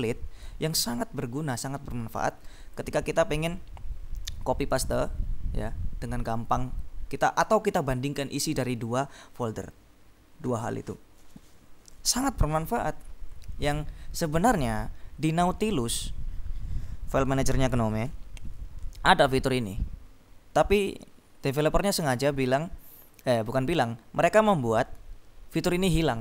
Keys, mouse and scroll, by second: 1.6-2.9 drag, 3.6-4.8 scroll down 2, 5.3-5.9 scroll down 2, 7.1-7.7 scroll down 2.